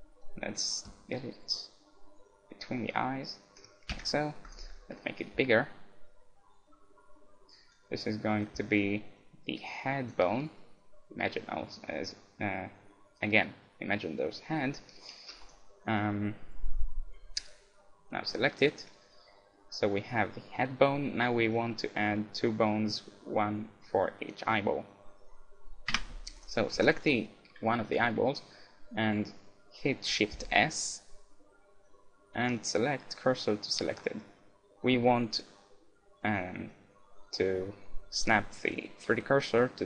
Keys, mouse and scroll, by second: 0.2-2.0 drag, 4.0 Tab, 4.5-6.3 right drag, 5.0-6.8 drag, 8.4-10.2 drag, 11.3-13.3 middle drag, 14.6-16.0 middle drag, 16.0-17.4 right drag, 17.4-18.5 scroll up 1, 18.5-21.2 middle drag, 21.2 scroll down 1, 21.4 Tab, 21.5-24.1 middle drag, 26.0 Tab, 26.4-28.7 right drag, 26.7 Tab, 27.7-30.0 middle drag, 30.4 shift+s.